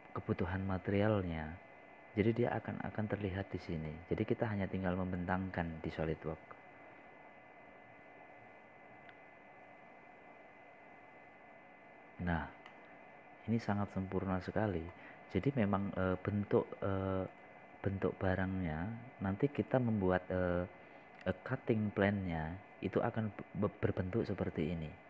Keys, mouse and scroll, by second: 8.2-9.3 drag, 15.1-15.7 scroll up 1, 15.7-18.3 middle drag, 18.3-19.0 scroll down 1, 19.1 click, 21.2-21.6 scroll up 1, 21.6 scroll down 1, 22.0 scroll up 1, 22.6 click, 23.0 scroll down 1, 23.6-24.1 scroll up 1, 24.1 scroll down 1.